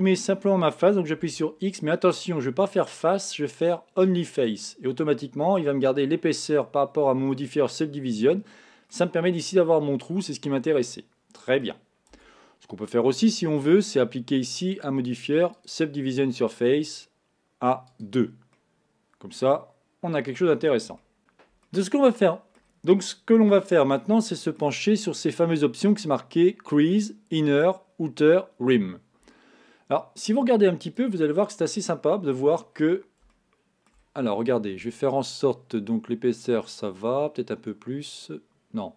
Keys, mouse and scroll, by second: 1.2 x, 5.1-8.1 middle drag, 10.7-12.1 middle drag, 12.1 Tab, 13.9-16.8 drag, 17.9 click, 18.5-21.2 middle drag, 22.0-27.2 middle drag, 29.5-31.0 middle drag, 31.0 click, 31.9-32.4 scroll up 2, 32.5-33.4 scroll down 1, 33.4-36.4 shift+middle drag, 36.8-38.9 drag.